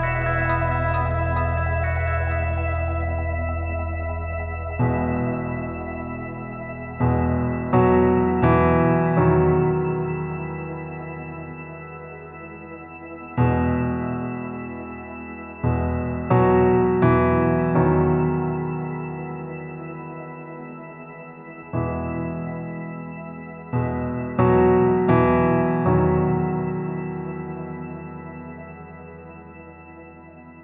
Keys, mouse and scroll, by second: 0.7 scroll up 1, 1.3 click, 2.1 scroll up 1, 2.6 click, 3.3-6.2 drag, 6.7 click, 7.6-9.6 drag, 10.2 click, 13.5 click, 16.0 click, 18.1 click, 20.4 click, 23.1 click, 24.4 click, 26.7 alt+middle click, 26.7 alt+scroll down 1, 26.9-28.2 alt+drag, 28.4-29.0 scroll up 4, 29.2 alt+click, 29.5 scroll up 2, 29.9 alt+middle click, 30.3-30.6 scroll down 3.